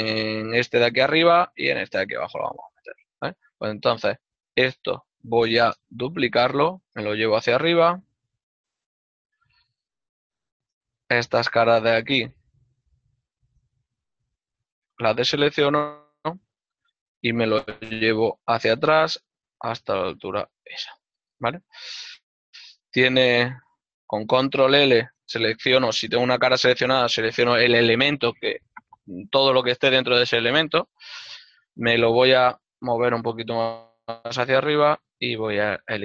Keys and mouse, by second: 3.4 middle click, 6.3 shift+d, 7.0 z, 8.3 g, 9.8 shift+middle click, 11.5 ctrl+Tab, 12.0 shift+middle click, 13.6 z, 14.6 click, 15.1 middle click, 16.3 z, 16.7 click, 18.0 g, 20.0 click, 20.7 shift+middle click, 23.9 ctrl+l, 25.3 shift+middle click, 31.2 middle click, 32.5 g, 34.3 shift+middle click.